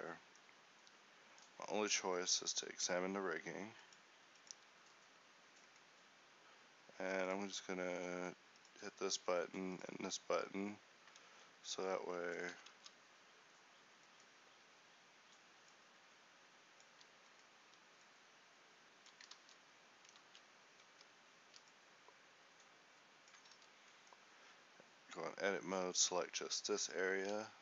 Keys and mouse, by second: 1.0 a, 11.9 Tab, 12.9 Tab, 13.3 ctrl+t, 16.5 click, 18.7-20.0 drag, 18.7-20.0 right drag, 20.0 ctrl+z, 20.7 Tab, 21.5 a, 22.3-27.4 drag, 22.4 ctrl+e, 24.1 z.